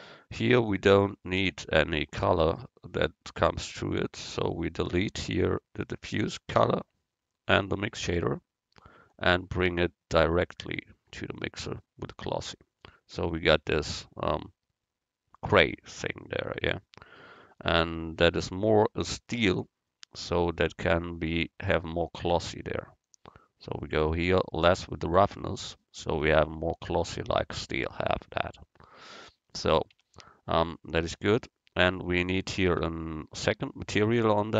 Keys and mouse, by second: 4.5-6.4 drag, 4.5-6.4 right drag, 6.8 x, 7.8-11.3 drag, 8.3 x, 23.1-25.0 drag, 27.7 middle click, 30.0 Tab, 32.8 Tab, 33.5 Tab.